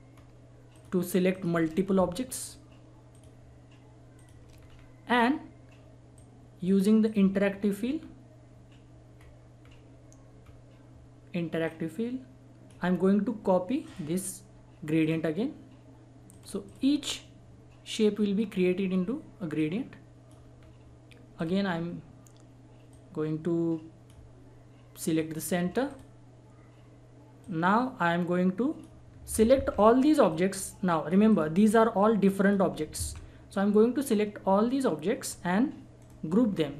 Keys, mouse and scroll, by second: 0.1 scroll up 1, 0.7 shift+click, 1.8 scroll up 1, 2.3 shift+click, 4.6-5.0 scroll down 1, 6.1 click, 7.5-7.9 scroll down 1, 8.4-8.7 scroll up 1, 9.6-10.1 scroll down 1, 10.4 scroll up 1, 11.6-13.8 drag, 17.0 scroll down 1, 18.9-19.3 scroll up 1, 19.5 click, 20.6 scroll down 1, 21.3 click, 21.6-22.9 scroll up 1, 22.9-25.0 drag, 25.4 scroll down 1, 25.9-29.5 drag, 29.5 ctrl+z, 30.3 click, 31.6 scroll up 1, 32.2 click, 33.0 ctrl+z, 34.0-35.9 drag, 35.9 right click.